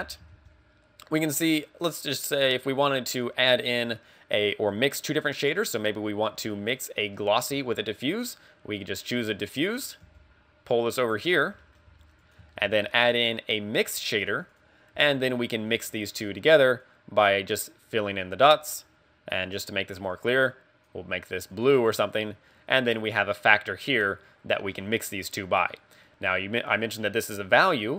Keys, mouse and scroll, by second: 0.2 x, 0.4 shift+a, 9.6 middle click, 10.1 g, 11.2 click, 11.3-11.7 scroll down 3, 11.7 middle click, 11.9 g, 12.4 click, 12.6 shift+a, 15.1 g, 16.4 g, 16.9 click, 19.7 click, 23.5 click.